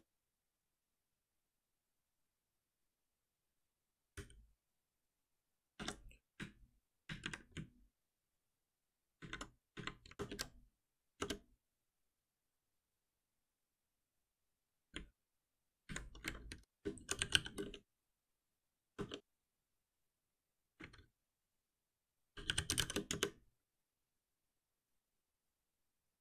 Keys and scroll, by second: 4.1 ctrl+alt+l, 5.7 Escape, 10.1 alt+Return, 16.5 ctrl+alt+c, 21.0 ctrl+alt+c.